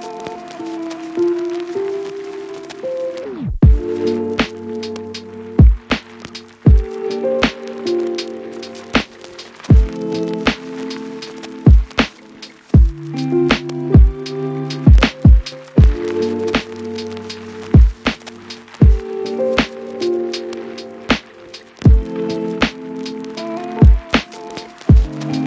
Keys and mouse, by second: 0.0 shift+middle click, 0.3 a, 1.1 F2, 2.4 F2, 3.3 middle click, 3.5 a, 3.6 shift+click, 3.7-5.6 middle drag, 6.7 F2, 7.3 BackSpace, 7.9 F2, 8.5 BackSpace, 8.5 KP_1, 9.1 ctrl+F2, 9.1 ctrl+click, 9.5 Delete, 10.1 F2, 10.4 Left, 10.6 BackSpace, 11.2 ctrl+F2, 11.2 ctrl+click, 11.5 Left, 11.6 BackSpace, 12.2 ctrl+F2, 12.2 ctrl+click, 12.4 Left, 12.6 Left, 12.8 BackSpace, 13.3 ctrl+F2, 13.3 ctrl+click, 13.7 Left, 13.9 BackSpace, 14.4 F2, 14.8 Left, 15.8 ctrl+F2, 16.0 Left, 16.2 BackSpace, 16.9 shift+middle click, 17.7-19.6 middle drag, 17.9 F2, 18.5 BackSpace, 19.0 ctrl+F2, 19.4 Left, 19.6 click, 19.6 BackSpace, 21.4 shift+click, 21.7 a, 22.8 click, 22.9 g, 23.2 x, 23.4 a, 23.9 alt+v, 24.3 a, 24.7 ctrl+s.